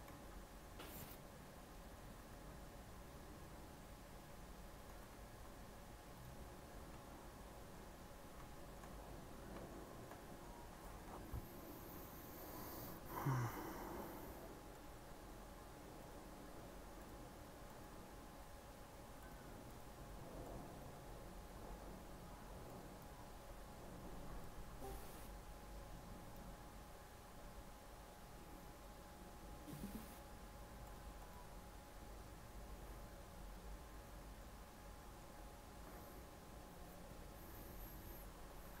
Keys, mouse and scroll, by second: 0.0 g, 1.6 middle click, 2.2 z, 4.8 g, 6.8 z, 7.6 middle click, 8.2-8.5 scroll up 2, 8.5 shift+middle click, 9.0-9.5 scroll up 2, 9.5-12.3 shift+middle drag, 12.3 scroll down 1, 14.0 click, 14.7-16.2 drag, 17.0 click, 19.6 click, 22.7-34.0 drag, 34.0-37.1 middle drag.